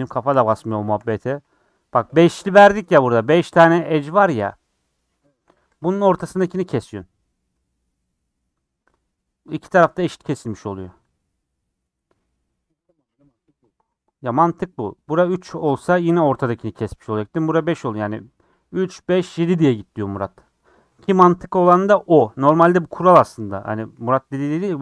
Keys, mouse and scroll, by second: 0.3 scroll up 2, 0.7 shift+middle click, 1.3 2, 2.7 click, 3.5-5.8 shift+drag, 11.5 click, 13.9 click, 16.1 click, 23.1-23.5 scroll down 4, 23.5 middle click, 24.0 scroll up 5, 24.4 scroll down 4, 24.7 middle click.